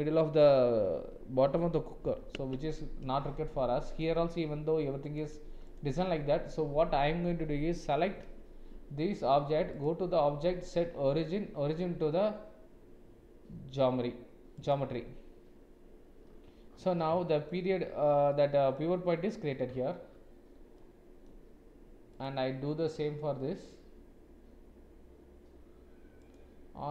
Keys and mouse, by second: 17.1 shift+click, 18.3 middle click, 20.8 middle click, 22.1 click, 26.3-26.9 drag.